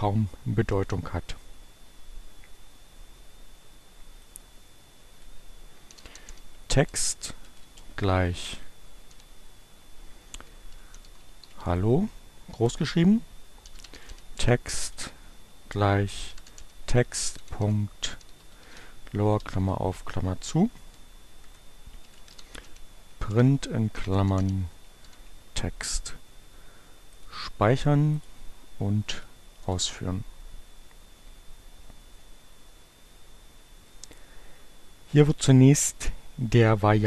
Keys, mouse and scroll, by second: 4.0-5.2 drag, 5.3-19.4 typing, 12.3 Return, 20.1 Return, 21.3-25.1 typing, 27.0 click, 27.9 click, 28.7 Up, 29.5 Return.